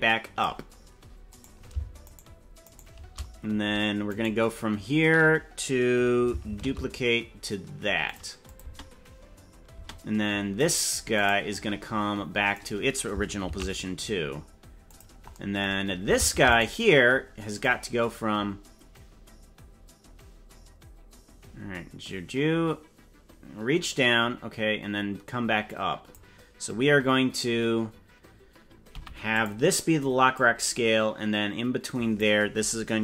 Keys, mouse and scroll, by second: 1.6 right click, 2.2 shift+right click, 2.8 right click, 4.2 right click, 6.6 shift+d, 8.4 click, 8.6 space, 9.8 space, 10.8 right click, 11.4 right click, 12.6 right click, 13.6 shift+d, 16.4 ctrl+Tab, 16.6 right click, 17.6-26.1 drag, 30.4-32.2 drag.